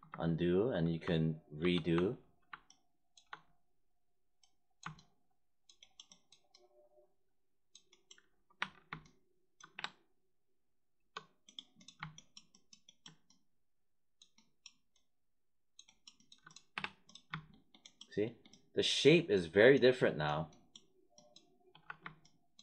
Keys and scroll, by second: 1.6 ctrl+y, 8.6 1, 9.7 3, 16.7 3.